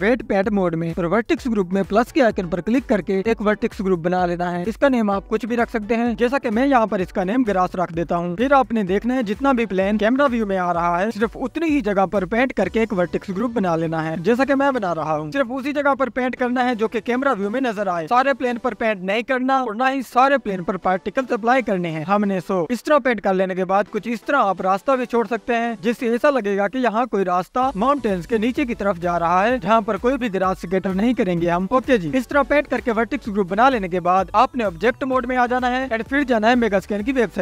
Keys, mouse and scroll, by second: 1.1-8.8 drag, 8.8 s, 9.8 click, 11.9-14.6 drag, 12.5 KP_7, 12.8-13.1 scroll up 2, 13.5-13.8 scroll down 1, 18.0 click, 18.9-24.3 drag, 28.4-31.9 drag, 30.7 scroll up 4, 32.7-34.1 scroll down 5, 34.1 click.